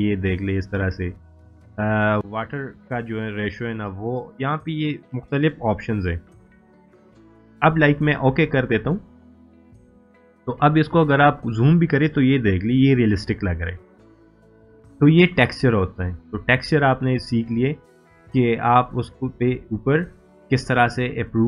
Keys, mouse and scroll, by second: 2.2 click, 9.2 scroll down 1, 10.3 scroll up 1, 10.9 scroll down 1, 15.4-16.3 drag, 19.4-21.4 drag.